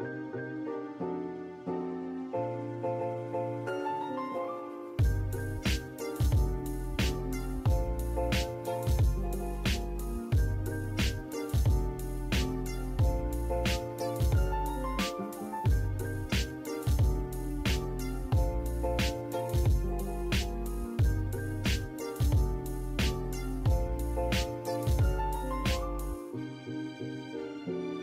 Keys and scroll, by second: 5.3 m, 5.4 space, 8.4-9.3 typing, 13.6-15.4 typing, 15.8 Escape, 18.2 Escape, 20.9 Escape, 25.4 space.